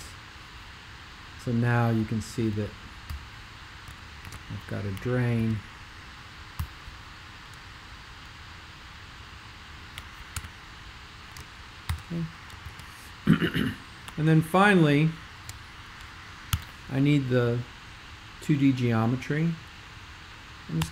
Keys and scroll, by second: 0.0 Return, 3.1 ', 4.2 shift+super+g, 5.4 super+1, 6.5 ;, 10.4 super+5, 11.8 alt+shift+super+k, 12.6 super+2, 16.5 super+5.